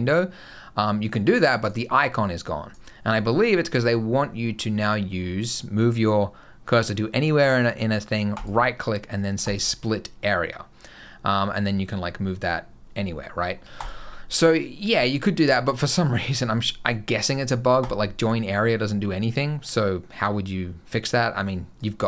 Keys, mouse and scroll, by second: 2.3 click, 8.2 right click, 16.1 right click, 21.6 click.